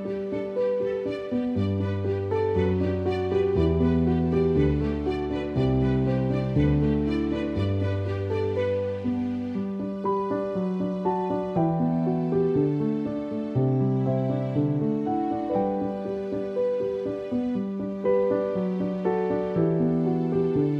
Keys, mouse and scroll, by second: 0.5 click, 3.4 click, 5.8 click, 7.4 space, 7.7 click, 7.8 space, 8.3 ctrl+=, 11.3 right click, 12.0 click, 13.9 click, 15.6 click, 16.0 ctrl+alt+click.